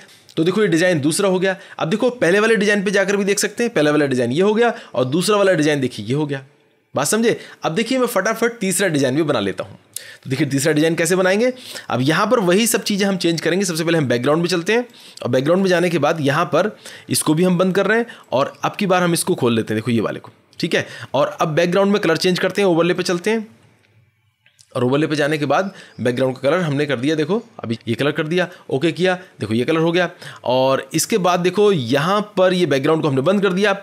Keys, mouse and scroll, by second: 3.2 click, 5.6 click, 13.5-14.0 scroll, 14.9 click, 14.9-15.5 scroll, 15.5-16.1 scroll, 17.0-17.6 scroll, 18.2 click, 18.7 scroll, 19.7 click, 20.9-21.5 scroll, 22.8 click, 22.8 scroll, 22.9 click, 24.3 click, 25.4 click, 25.9 click, 27.0 click, 27.6 click, 28.4 click, 30.5-31.1 scroll, 31.6 scroll, 33.2 click, 33.2 scroll.